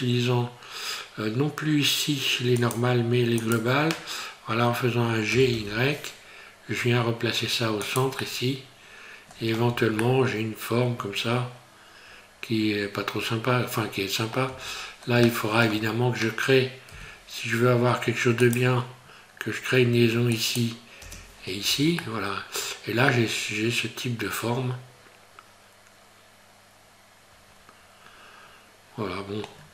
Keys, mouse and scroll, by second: 5.3 g, 8.2 middle click, 9.7 Tab, 10.0 middle click, 14.5 Tab, 14.8-15.3 scroll up 2, 15.3 shift+middle click, 16.9 k, 21.7 Tab, 22.0 middle click, 29.5 scroll down 4.